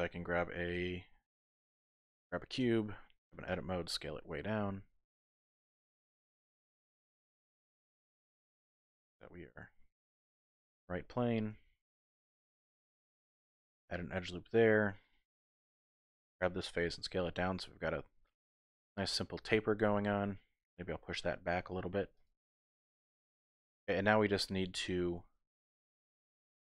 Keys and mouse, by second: 0.7 shift+a, 2.6 Tab, 3.5 s, 6.8 click, 7.0 Tab, 7.3-8.4 middle drag, 9.1 g, 9.2 y, 10.2 click, 10.4 middle click, 11.3 typing, 11.5 Tab, 11.8 click, 12.7 ctrl+r, 13.6 click, 14.5 click, 15.3 middle click, 15.5 3, 16.8 s, 18.7 click, 19.0-20.2 middle drag, 21.0 g, 21.1 y, 22.1 click, 22.4 middle click, 22.6 click, 24.0-25.0 drag.